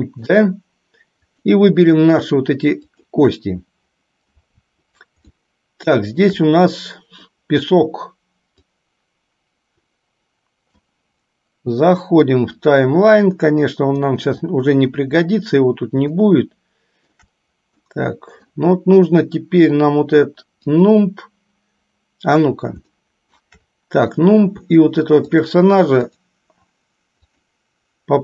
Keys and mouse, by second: 0.1 shift+middle click, 1.3 shift+click, 5.5 shift+middle click, 6.8 middle click, 8.7-11.0 drag, 14.1 click, 16.3-17.3 shift+middle drag, 17.9 middle click, 20.7 click, 23.2 shift+middle click, 25.4-25.8 shift+drag, 26.2 shift+click, 27.5 shift+click.